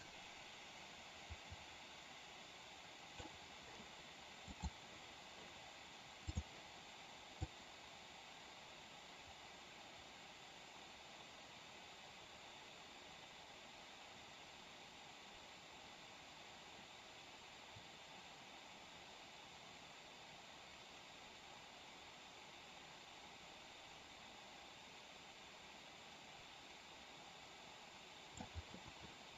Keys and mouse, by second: 4.4 click, 6.2 click, 7.4-28.4 drag.